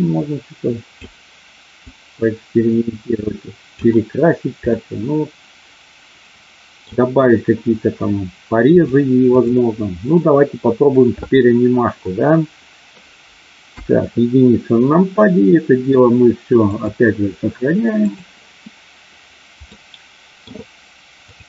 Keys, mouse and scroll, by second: 1.9-3.6 drag, 4.6-6.8 middle drag, 8.8 click, 13.6 KP_1, 16.6-18.1 drag, 19.6 middle click.